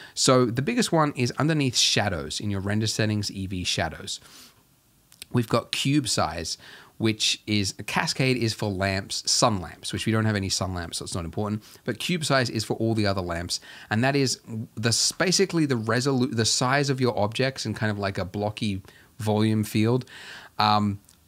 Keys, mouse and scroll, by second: 21.1-21.2 scroll up 3.